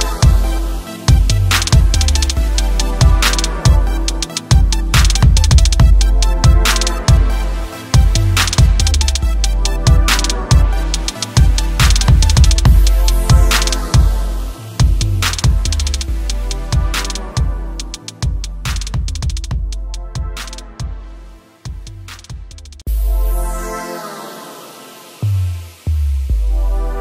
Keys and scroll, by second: 5.2 ctrl+Return, 10.8 shift+F8, 13.4 shift+F7, 16.7 shift+F6, 24.9 Delete.